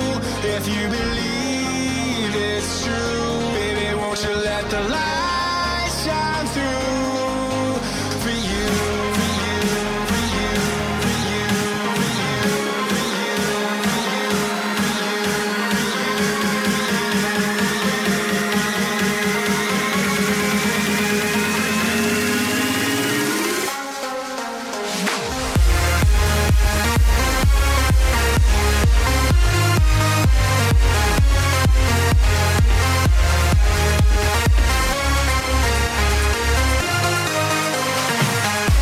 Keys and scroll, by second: 10.3 ctrl++, 25.2 ctrl+alt+z.